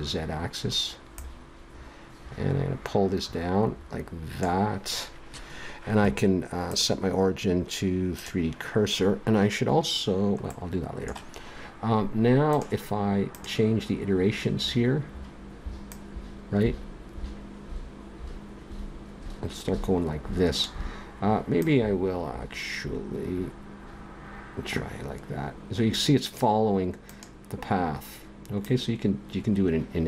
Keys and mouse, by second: 0.3 middle click, 1.1-3.0 drag, 6.7-9.7 drag, 10.5-12.5 middle drag, 12.5-17.8 drag, 21.6-23.5 drag, 27.1-30.0 drag.